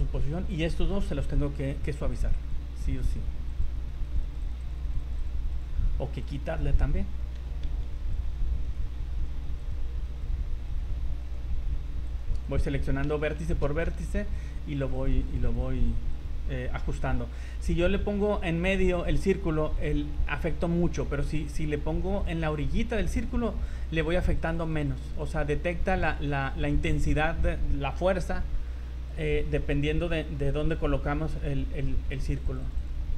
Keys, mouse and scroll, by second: 0.0-0.4 scroll up 3, 0.7 shift+middle click, 2.3 click, 3.0-5.0 click, 4.2 click, 4.2 click, 4.7 click, 4.8 click, 5.2 click, 5.5 click, 6.6 click, 7.8 ctrl+z, 8.0 click, 8.6 right click, 9.1 click, 9.6 click, 10.1 click, 10.7 right click, 11.2 click, 12.1 right click, 12.4 click, 13.2 shift+middle click, 14.0 ctrl+z, 14.3 click, 14.8 click, 14.9 click, 15.3 click, 15.8 click, 16.1 right click, 23.3 click, 23.6 click, 23.8 click, 24.0 click, 24.2 click, 24.4 click, 24.7 click, 24.9 click, 25.2 click, 25.9 click, 26.1 click, 26.6 click, 29.1 right click, 29.6 right click, 30.6 click, 31.5 right click, 32.1 click, 32.4 click, 32.7 click, 32.8 click.